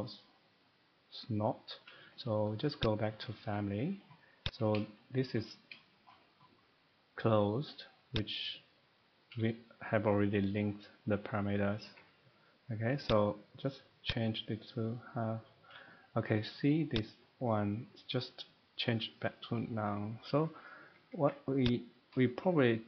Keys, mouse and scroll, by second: 2.8 click, 4.5 click, 5.3 shift+middle click, 5.7 middle click, 6.0 shift+middle click, 8.1 click, 11.8 Escape, 12.6 middle click, 13.1 click, 14.1 click, 17.1 click, 20.8 Escape, 21.0 Escape, 21.2 Escape, 21.7 click.